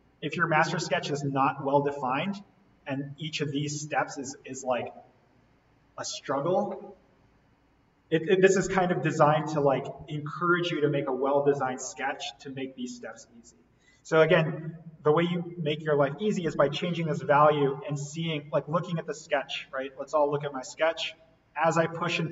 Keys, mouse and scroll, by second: 0.8 right click, 1.8 click, 14.8-15.1 scroll down 1, 17.1-17.9 scroll up 1, 17.9 click, 19.0-19.4 scroll up 1, 19.4-19.7 scroll down 1, 20.8 click.